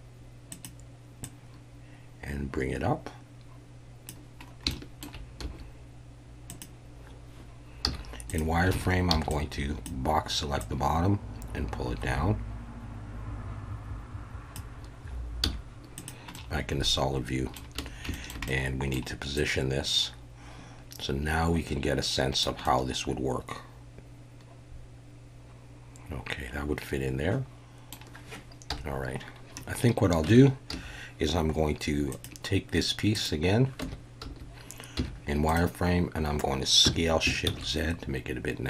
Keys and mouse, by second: 0.5 click, 1.3-4.1 drag, 4.7 shift+middle click, 5.4 s, 6.5 click, 7.8 z, 8.7 alt+a, 9.2 b, 10.7-14.5 drag, 15.4 z, 16.3-17.6 middle drag, 17.8 a, 18.1 shift+middle click, 18.5 middle click, 19.4-22.4 drag, 22.6-27.9 middle drag, 28.7 KP_1, 30.3 Tab, 30.7 a, 33.1 click, 33.8 Tab, 34.2 a, 35.0 z, 36.8 s, 37.4 shift+z.